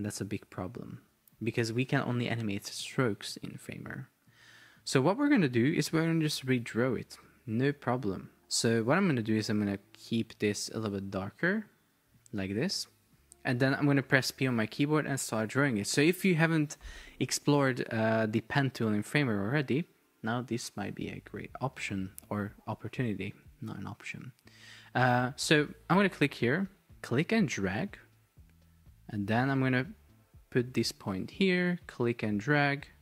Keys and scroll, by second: 1.1 Escape.